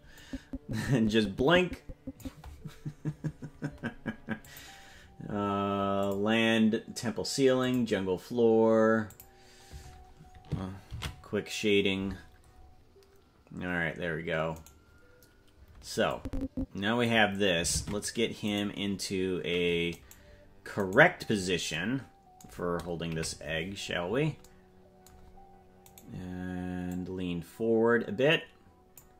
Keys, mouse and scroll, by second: 0.3-2.6 drag, 4.4 click, 6.2 click, 8.0 click, 9.1 click, 13.2 ctrl+s, 14.7 right click, 16.1-17.1 drag, 17.7 ctrl+Tab, 18.6 right click, 20.1 right click, 21.2-21.7 scroll down 5, 23.1 KP_Decimal, 23.8-24.4 scroll down 6, 26.0 right click, 26.9-29.0 drag.